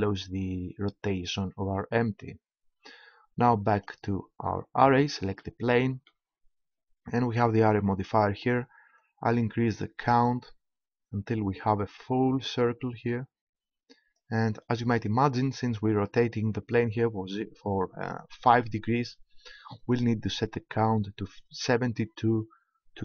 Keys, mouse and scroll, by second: 3.7-5.6 right drag, 9.0-10.7 drag, 19.7-21.6 drag, 21.7 middle click.